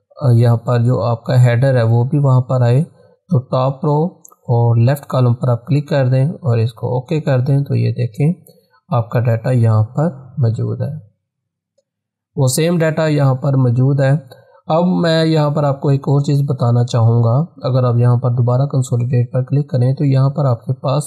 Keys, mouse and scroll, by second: 3.7 click, 9.7-12.6 drag, 18.6 click.